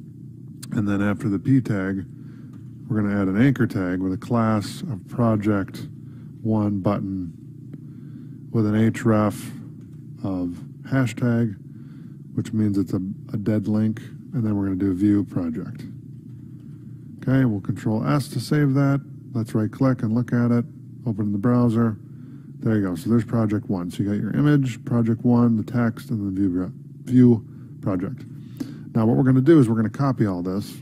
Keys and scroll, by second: 4.2 space, 8.4 Right, 8.7 space, 11.3 Right, 13.7 ctrl+Left, 15.1 space, 17.3 ctrl+s, 28.4 Tab.